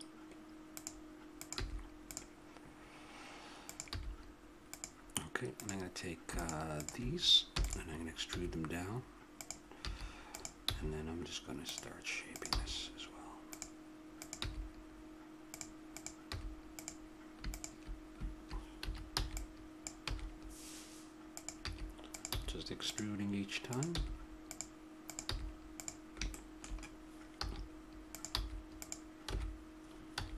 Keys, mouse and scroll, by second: 1.4-3.3 drag, 1.6 g, 3.6-9.3 drag, 3.9 g, 7.5 e, 8.3 g, 9.9 a, 10.3-14.1 drag, 10.7 g, 12.5 g, 14.4 g, 16.2 g, 18.8 a, 19.2 b, 20.0 e, 21.6 a, 22.1 right click, 22.3 g, 22.8-24.4 drag, 23.9 g, 25.3 g, 26.3 click, 27.3 a, 28.3 g, 28.7-30.3 drag, 29.3 b.